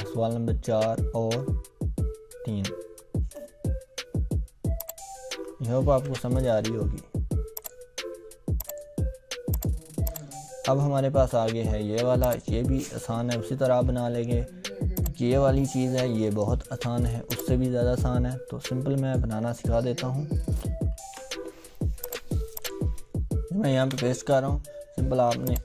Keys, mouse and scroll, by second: 3.0-3.7 scroll down 1, 4.8-5.7 click, 6.0 BackSpace, 7.6 click, 10.6 scroll down 1, 12.6-13.0 drag, 13.6-14.3 scroll down 1, 15.0-16.6 drag, 19.9-20.4 scroll down 1, 22.0 click, 23.7 ctrl+v, 24.2-24.5 scroll down 1, 25.5 click.